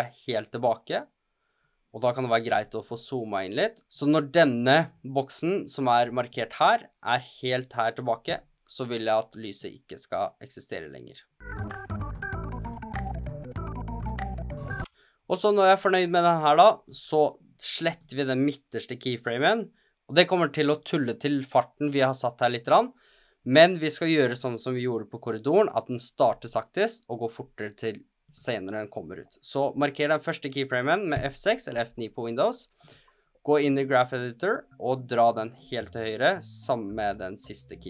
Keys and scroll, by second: 31.1 F6.